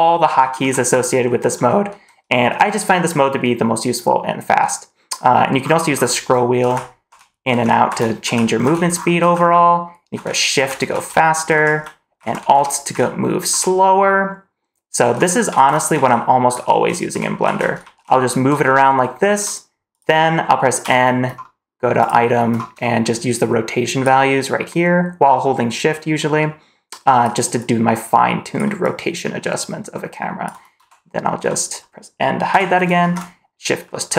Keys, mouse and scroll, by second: 20.7 n, 21.9 click, 23.0 shift+click, 23.9 shift+click, 25.9-27.2 shift+drag, 27.5-28.5 shift+drag, 28.7 shift+click, 29.1-30.3 shift+drag, 30.6 m, 32.4 n, 32.9 shift+`.